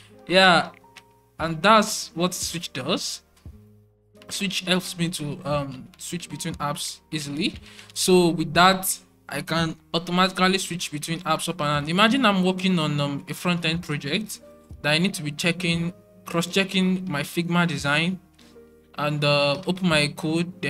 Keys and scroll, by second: 0.0 alt+super+1, 0.6 alt+super+2, 1.7 alt+super+2, 2.0 alt+super+3, 2.5 alt+super+1, 3.1 alt+super+2, 3.4 alt+super+1, 4.7 alt+super+2, 5.3 alt+super+1, 6.4 alt+super+2, 10.1 alt+super+1, 10.6 alt+super+2, 10.8 alt+super+1, 11.5 alt+super+2, 11.7 alt+super+1, 12.4 alt+super+1, 14.1 alt+super+2, 14.6 alt+super+1, 15.0 alt+super+2, 15.4 alt+super+1, 15.8 alt+super+2, 16.8 alt+super+2, 17.0 alt+super+3, 19.5 alt+super+2.